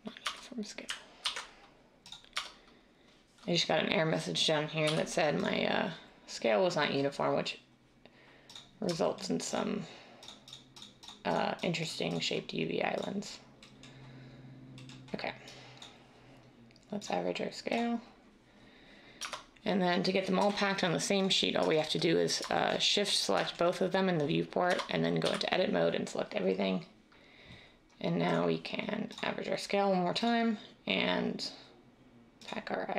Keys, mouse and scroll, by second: 0.2 Tab, 1.2 ctrl+a, 2.4 Tab, 4.9 u, 19.2 Tab, 20.4 \, 24.7 Tab, 25.3 typing.